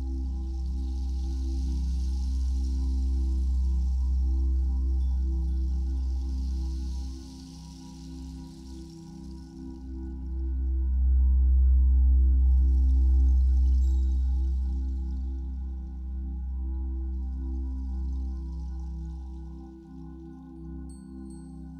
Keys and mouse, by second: 5.4-14.3 drag, 16.1 ctrl+s, 20.7-21.7 drag.